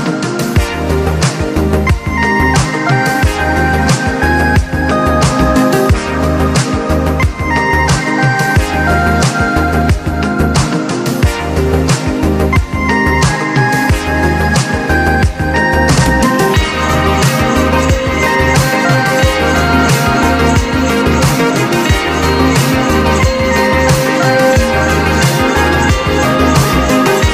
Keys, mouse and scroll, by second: 1.2 click, 1.6 ctrl+scroll up 2, 2.9 click, 3.7 alt+scroll up 1, 4.6-9.5 drag, 12.2 ctrl+scroll up 1, 13.0-14.2 drag, 14.2 ctrl+z, 14.7-18.9 drag, 20.2 click, 24.0 click, 25.0 click, 26.0 click.